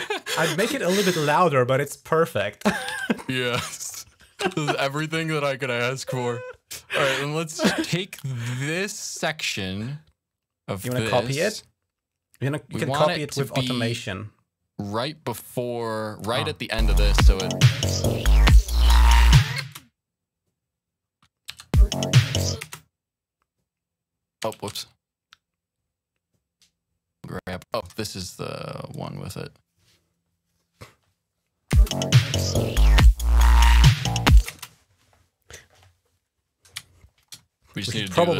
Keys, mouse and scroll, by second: 2.7 typing, 4.2 typing, 5.5-10.5 drag, 12.2-13.9 drag, 14.1 click, 16.2 click, 16.6 space, 19.6 space, 21.3 h, 22.4 space, 22.9-24.6 drag, 23.5 typing, 24.4 ctrl+z, 25.2 click, 27.6 click, 28.8-31.1 drag, 31.2 click, 31.6 space, 34.4 space, 37.3-37.7 scroll down 1, 38.0-38.3 scroll up 1.